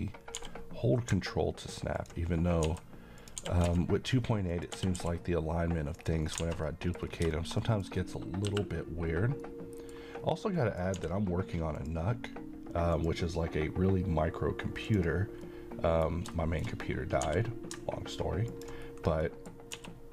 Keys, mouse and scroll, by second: 0.4 g, 2.0 ctrl+click, 2.4 scroll up 1, 2.7 s, 3.2 click, 3.4 g, 3.7 z, 4.5 click, 4.8 g, 5.0 y, 6.0 click, 6.3 scroll down 1, 6.4 alt+a, 6.7 middle click, 7.1 scroll down 1, 7.3 middle click, 10.3-10.6 scroll up 1, 10.6 middle click, 11.0 d, 11.8 click, 15.5-16.0 middle click, 17.3 g, 18.5 ctrl+click, 19.3 middle click, 19.8-20.1 typing.